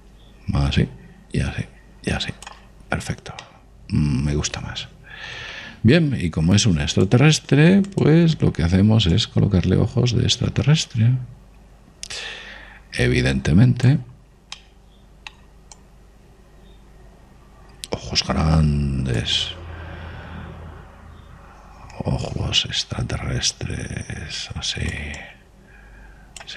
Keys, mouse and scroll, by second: 4.5-6.3 middle drag, 8.0 click, 8.6-9.6 middle drag, 10.2 click, 15.1-18.4 middle drag, 16.9 click, 20.4 click, 26.2 click.